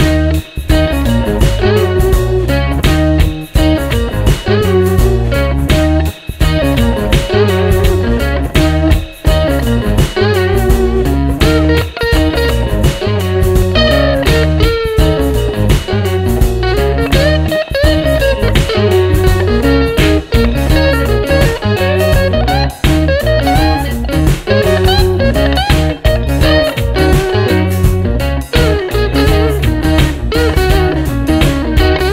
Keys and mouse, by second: 2.0 double click, 4.0 ctrl+z, 7.3 alt+click, 9.8 alt+click, 13.7 alt+click, 15.7 alt+click, 16.8 double click, 18.3 alt+click, 20.2 alt+click, 22.3 alt+click, 23.5 double click, 24.6 alt+click, 25.5 double click, 28.0 alt+click, 28.8 double click, 30.2 alt+click, 31.0 alt+click.